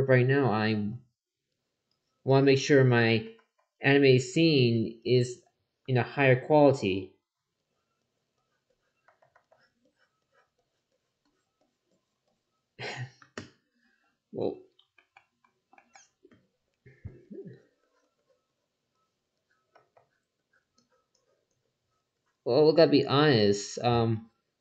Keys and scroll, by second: 0.7 ctrl+z, 3.1 ctrl+z, 9.0 ctrl+z, 19.7 ctrl+z.